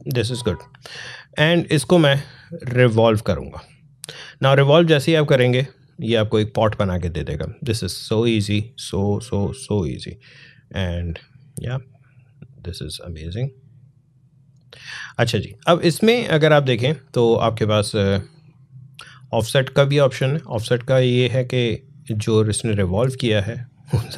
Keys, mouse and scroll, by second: 0.3-0.8 alt+scroll down 1, 2.6-3.3 alt+scroll up 1, 4.6 click, 9.3-12.6 drag, 12.6-16.8 drag, 18.3-21.9 drag, 21.9-24.1 drag.